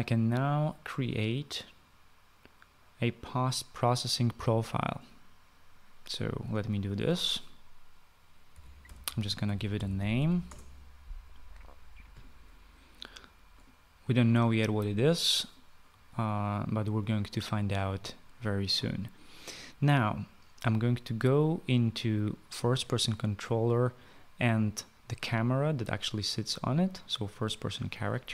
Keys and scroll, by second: 8.6-10.8 typing.